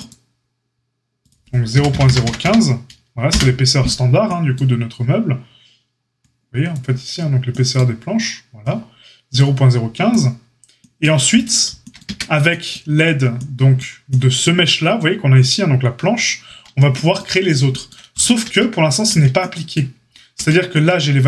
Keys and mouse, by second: 11.4-21.2 shift+middle drag, 12.0 Tab, 16.4 Tab, 18.4 Tab, 19.1 Tab, 20.3 Tab.